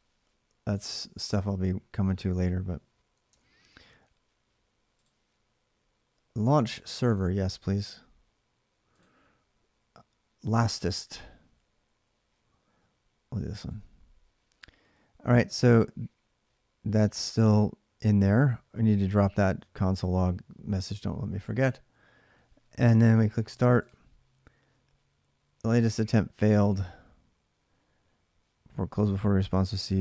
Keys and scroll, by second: 3.1 alt+Tab.